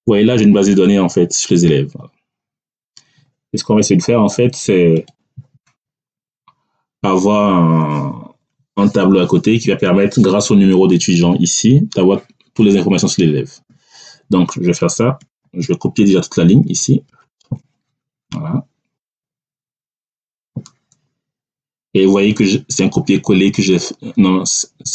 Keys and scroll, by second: 6.0 Down, 17.0 ctrl+shift+Right.